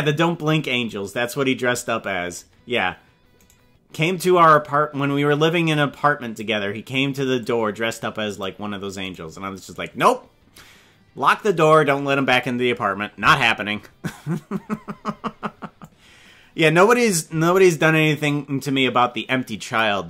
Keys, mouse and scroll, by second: 0.9-2.4 drag, 3.5 right click, 4.4-6.4 drag, 7.4-8.4 drag, 9.1 right click, 9.9-12.4 drag, 15.8-17.0 drag, 18.4-19.8 drag.